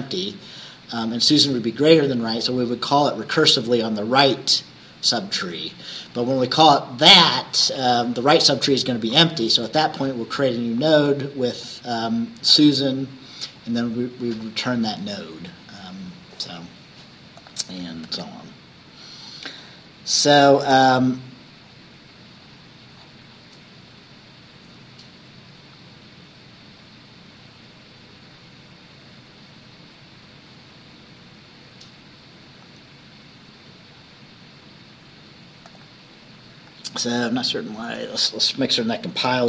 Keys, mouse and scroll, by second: 0.0-0.3 scroll down 1, 5.2-5.6 scroll up 2, 5.8 scroll up 2, 15.1-15.6 scroll down 2, 16.2-16.5 scroll down 2, 17.4 click, 18.1 ctrl+s, 18.6-19.2 scroll down 2, 19.8-20.2 scroll down 2, 20.9 scroll up 2, 21.7-22.0 scroll down 2, 22.5-22.8 scroll down 2, 23.0-23.7 scroll down 4, 31.4-31.8 scroll up 2, 35.7 click, 38.0 click.